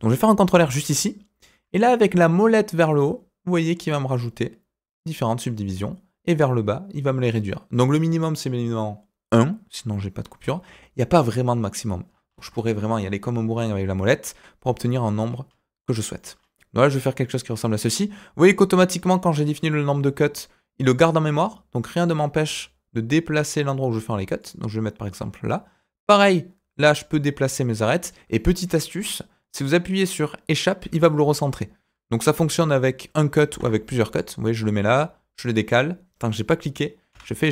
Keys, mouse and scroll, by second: 0.5 ctrl+r, 33.4 ctrl+r.